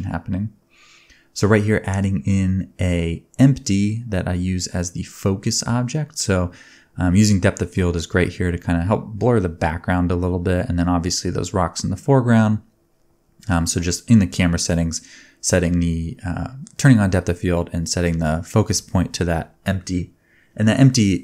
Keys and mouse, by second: 2.1-5.6 middle drag, 5.6 click, 6.5-8.0 drag, 10.8-15.1 drag, 11.2 g, 12.0 s, 13.0 g, 15.2 space, 17.5 space, 18.1 middle click, 18.5 g, 19.0-21.2 drag, 20.3-21.2 middle drag, 20.3-21.2 right drag.